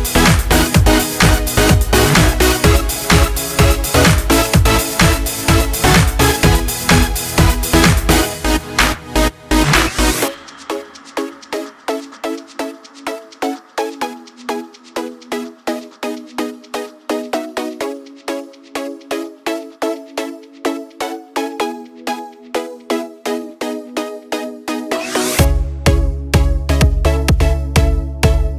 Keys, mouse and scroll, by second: 3.2-6.2 drag, 6.2-17.9 drag, 14.1 typing, 20.0-20.8 typing, 20.8-27.4 drag, 28.5 click.